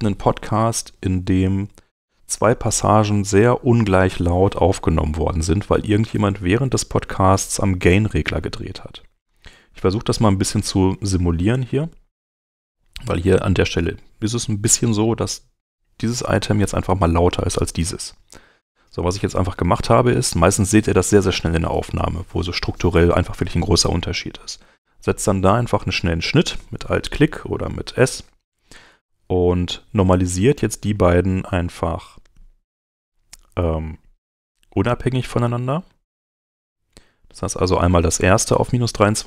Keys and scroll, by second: 6.9 s, 8.4 s, 9.7 s.